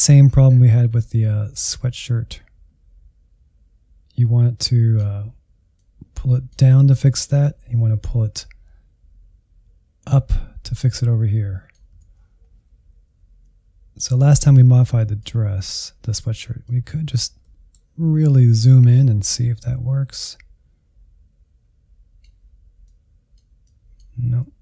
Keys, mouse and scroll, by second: 10.3-11.4 drag, 11.4 ctrl+z, 12.2 f, 13.3 scroll up 1, 14.2-16.2 drag, 16.2-17.2 middle drag, 17.2-18.3 scroll down 1, 18.3-20.9 drag, 21.2-24.6 drag.